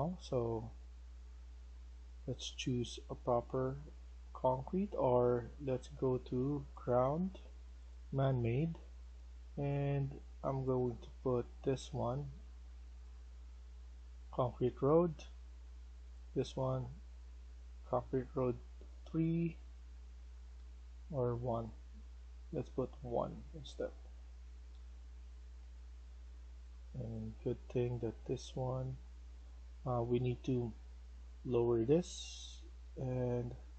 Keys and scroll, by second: 8.1 s, 15.1 w, 19.1-21.0 typing, 22.5-27.9 typing, 30.4-33.3 typing.